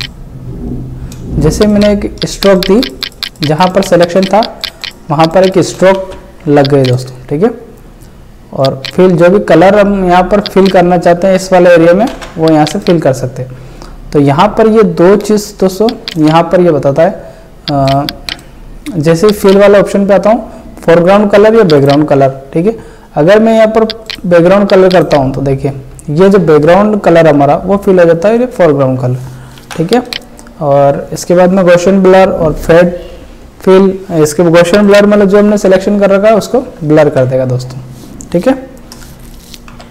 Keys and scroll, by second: 1.5 space, 5.7 ctrl+space, 5.9 ctrl+z, 12.1 ctrl+alt+z, 29.6 ctrl+z, 37.0 ctrl+alt+z, 39.7 ctrl+s.